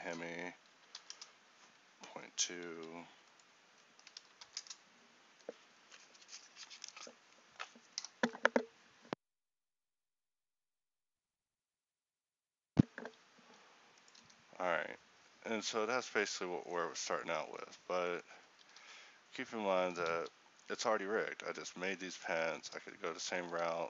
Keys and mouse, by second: 17.0 F12, 17.0 Escape, 18.7 r, 20.2 g.